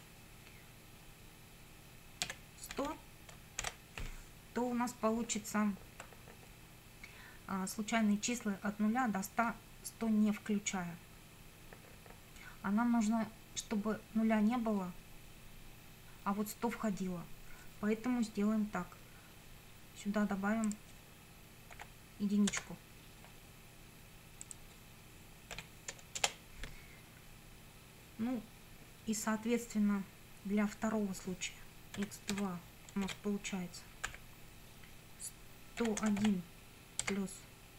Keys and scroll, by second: 2.3 1, 2.7 0, 3.6 shift+0, 21.8 1, 25.6 ,, 26.2 Return, 32.0 x, 32.3 2, 33.1 shift+;, 34.1 =, 35.6-36.7 typing.